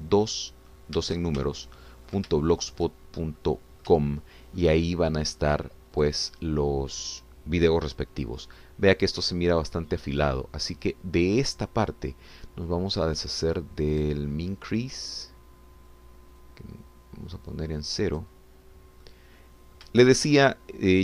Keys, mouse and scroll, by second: 0.2 shift+Tab, 1.6-1.9 scroll up 2, 2.5 ctrl+shift+click, 3.4 ctrl+shift+middle click, 4.4 middle click, 5.1 shift+middle click, 7.0 click, 17.4-19.4 drag, 20.0 middle click.